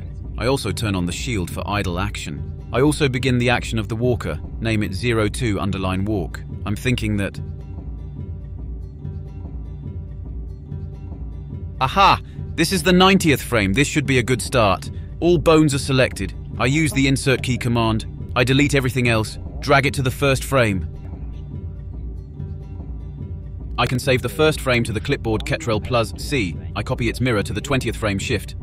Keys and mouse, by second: 2.0-2.3 drag, 2.9 click, 3.1 BackSpace, 5.0-5.7 drag, 6.1 a, 6.4-6.9 middle drag, 7.5-10.0 middle drag, 10.0-12.0 drag, 13.0-13.8 drag, 13.8 Delete, 15.8-17.4 drag, 18.7-19.4 drag, 19.8-20.5 drag, 21.0-23.3 drag, 22.9 Delete, 24.1-27.4 drag, 28.0 click, 28.3 click, 28.5 ctrl+c, 28.5 click.